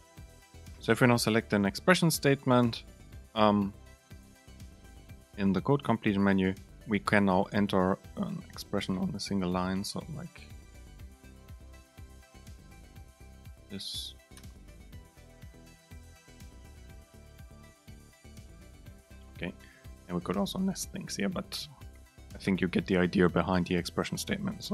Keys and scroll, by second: 3.4 super+space, 13.3 super+space, 14.9 Right, 15.9 super+space, 17.9 Up, 20.6 Down, 21.0 shift+Right.